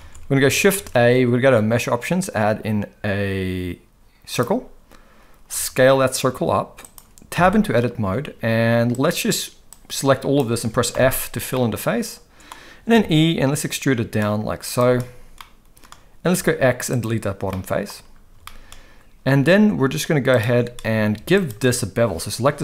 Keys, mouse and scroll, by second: 0.0 alt+a, 0.8 shift+a, 5.5 s, 7.4 Tab, 8.9 click, 9.8 click, 10.9 f, 11.5 middle click, 12.9 e, 15.4 middle click, 16.3 x, 17.5 middle click, 18.4 shift+middle click.